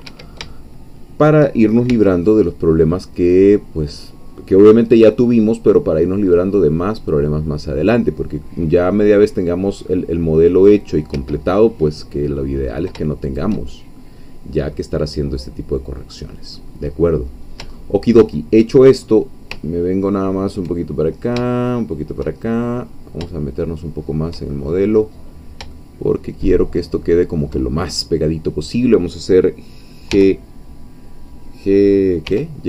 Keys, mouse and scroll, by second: 0.1 Escape, 0.5 shift+middle click, 1.9 shift+c, 2.3-10.9 drag, 11.2 Escape, 11.5-12.9 middle drag, 13.2 shift+click, 13.7-15.0 shift+middle drag, 15.0 scroll down 1, 15.4-16.7 middle drag, 16.8-17.5 scroll up 1, 17.8-18.8 shift+middle drag, 19.0-19.3 shift+scroll up 1, 19.6 ctrl+middle click, 20.6 ctrl+scroll up 1, 20.9 ctrl+scroll down 1, 21.5 shift+middle click, 22.4-23.2 shift+scroll up 2, 23.3-24.4 shift+middle drag, 24.6-25.1 shift+scroll up 1, 25.7-27.5 shift+middle drag, 30.1 g, 32.2 y.